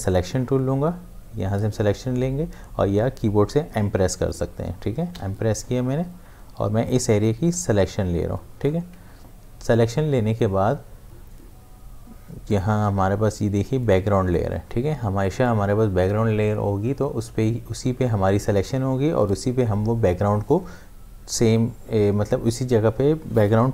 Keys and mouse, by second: 5.1 space, 7.1 m, 7.5 click, 7.5-10.9 drag, 12.4 click.